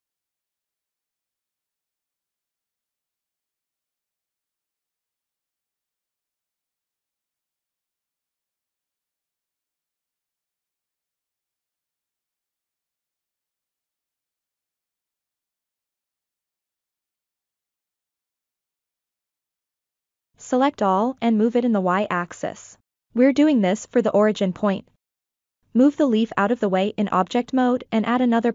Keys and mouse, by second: 1.7-4.3 middle drag, 4.8-5.3 drag, 6.0-7.5 drag, 8.0 click, 8.6-10.0 drag, 10.3-12.7 middle drag, 13.0-13.4 shift+middle drag, 13.6 middle click, 17.2 middle click, 17.9 KP_7, 19.0 ctrl+middle click, 19.4 shift+middle click, 20.3 a, 21.1-22.7 drag, 23.8 Tab, 24.2-24.8 middle drag, 25.4 click, 26.7-27.4 middle drag, 27.7-28.2 shift+middle drag.